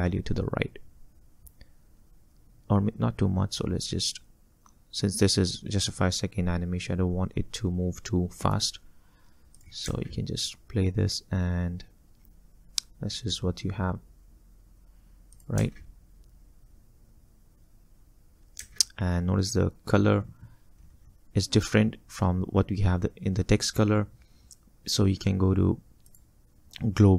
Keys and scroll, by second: 9.9 space, 15.7 space, 18.7 space.